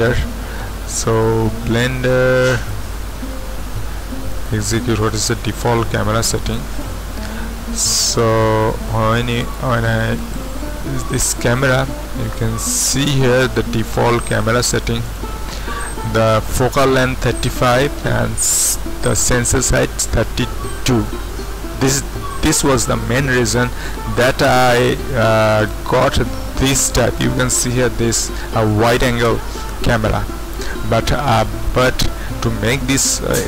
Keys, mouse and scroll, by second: 1.0 click, 2.4 click, 4.3 click, 6.5 click, 9.1 z, 9.4 click, 12.3 click, 13.8 click, 15.0 click, 25.6 click, 25.8-30.2 drag.